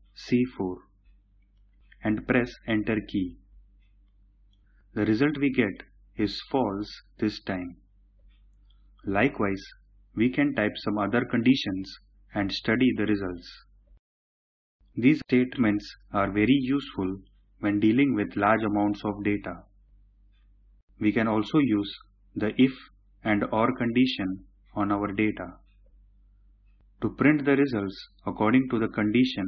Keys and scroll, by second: 2.3 Return.